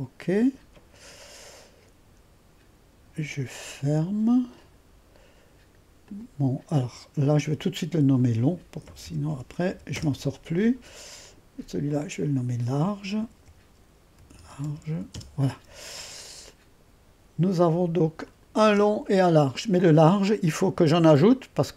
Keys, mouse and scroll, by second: 4.0 click, 6.0-7.9 drag, 7.9 F2, 8.6-10.2 typing, 11.2-13.2 drag, 13.2 F2, 13.3-15.3 typing, 16.4-17.7 drag, 18.2 click, 18.7 space.